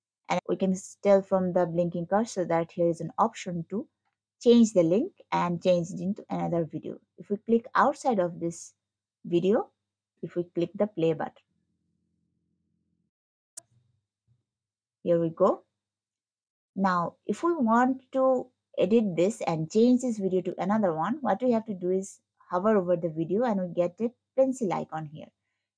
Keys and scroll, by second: 15.7 scroll.